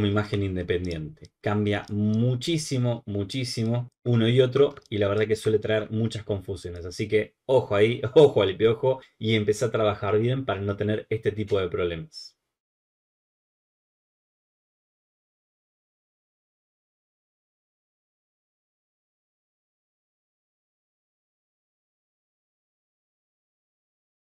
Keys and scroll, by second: 4.7 alt+space.